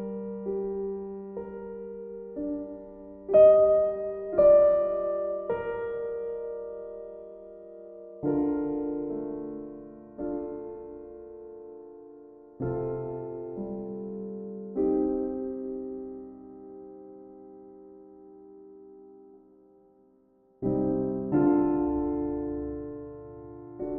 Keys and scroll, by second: 1.0 ctrl+e, 2.6 ctrl+c, 4.4 ctrl+v, 7.3 ctrl+z, 18.8 e.